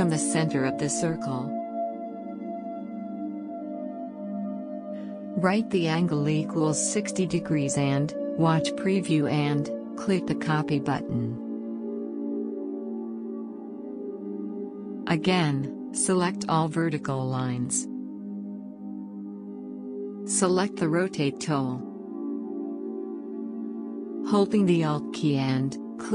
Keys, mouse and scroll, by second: 6.2 6, 6.9 0, 8.5-21.7 drag, 21.7 click.